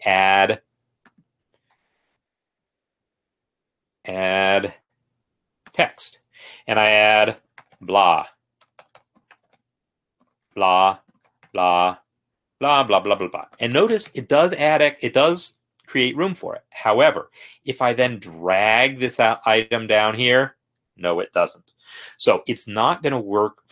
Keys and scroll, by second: 1.8 Escape, 2.0 Escape, 2.2 Escape, 2.2 `, 7.6-15.7 typing, 10.2 Return, 11.0 Return.